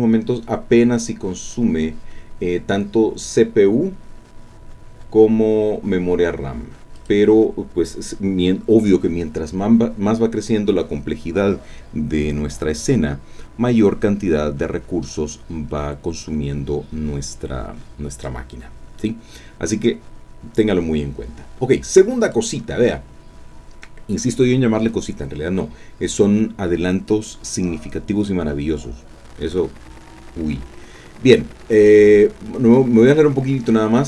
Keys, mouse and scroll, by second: 7.0 click, 22.2 click, 29.1-30.2 scroll down 1, 31.9-33.0 drag.